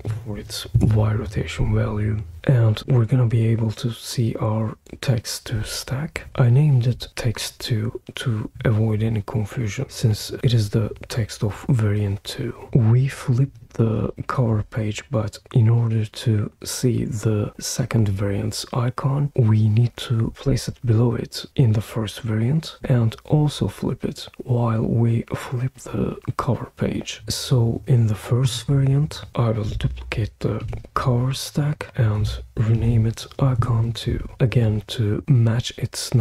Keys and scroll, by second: 0.0-0.6 typing, 0.7 Return, 30.6 super+d, 32.8 super+v, 33.6 Return.